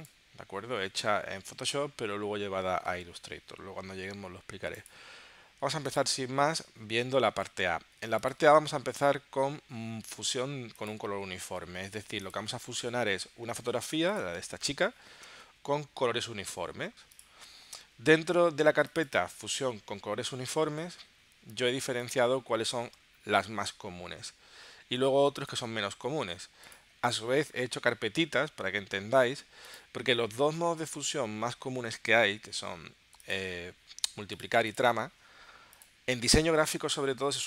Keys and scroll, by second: 2.9 space, 14.4 space, 15.2 space.